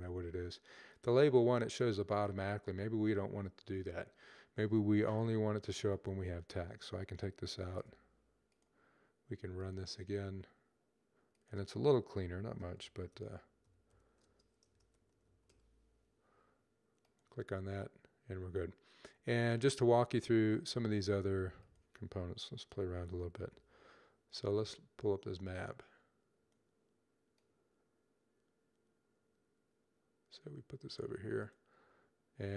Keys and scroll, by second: 12.2-15.2 typing, 22.3-23.2 typing.